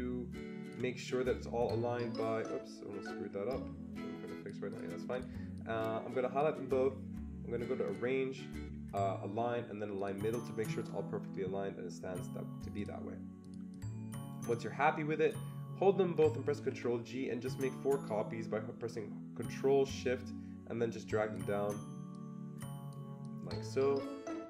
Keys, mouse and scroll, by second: 2.4-5.1 shift+drag, 5.1 click, 5.9-9.9 drag, 9.9-12.6 drag, 12.7 click, 13.4 click, 13.7-24.4 drag, 16.6 ctrl+g.